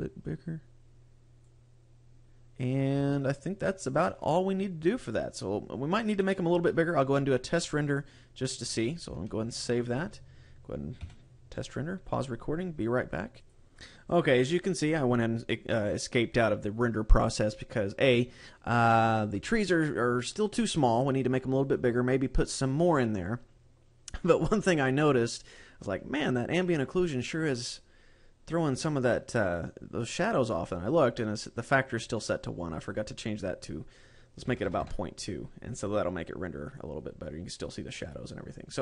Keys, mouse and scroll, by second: 2.7 scroll down 1, 2.9 shift+middle click, 9.3 ctrl+s.